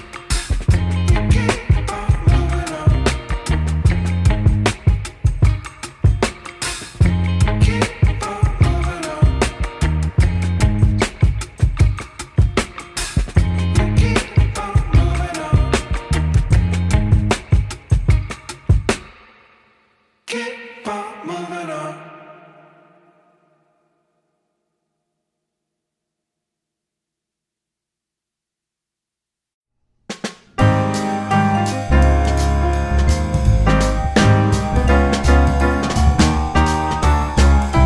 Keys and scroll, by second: 0.4 F4, 2.3 ctrl+z, 4.6 F4, 7.9 F4, 8.4 F4, 11.3 F3, 12.2 1, 12.3 F3, 12.9 F3, 15.5 alt+1, 15.6 F4, 16.0 alt+2, 16.2 F4, 17.0 ctrl+shift+c, 19.4 ctrl+shift+c, 20.9 ctrl+shift+c, 29.3 ctrl+r, 29.5 ctrl+c, 31.0 2, 31.1 F4, 31.8 F4, 33.3 F4, 34.9 F4, 36.3 F4, 37.5 F4.